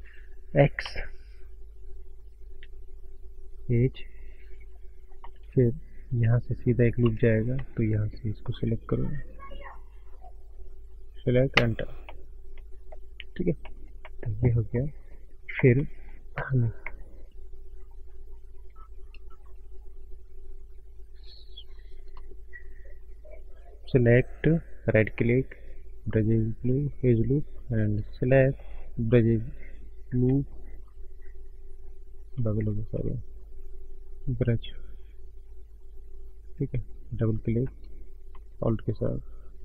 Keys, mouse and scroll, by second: 3.8 scroll up 1, 3.9 middle click, 4.4 click, 5.1 middle click, 12.0 middle click, 12.0-12.3 scroll up 1, 12.3 scroll down 4, 12.8 middle click, 13.2 click, 13.6 middle click, 14.0 middle click, 14.3 scroll up 3, 14.7 shift+middle click, 19.2 click, 19.4 shift+2, 21.0 click, 22.1 click, 22.3 shift+click, 24.5 right click, 26.5 right click, 27.4 click, 27.7 click, 28.3 shift+click, 28.7 right click, 33.2 right click, 35.7 right click, 35.9 click, 36.3 click, 37.3 click, 38.2 click, 38.8-39.4 alt+click.